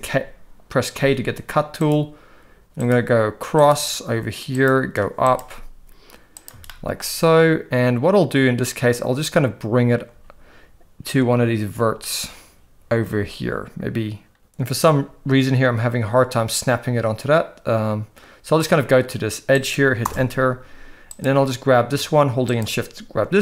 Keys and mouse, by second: 0.9 k, 6.7-20.1 shift+middle drag, 21.1 click.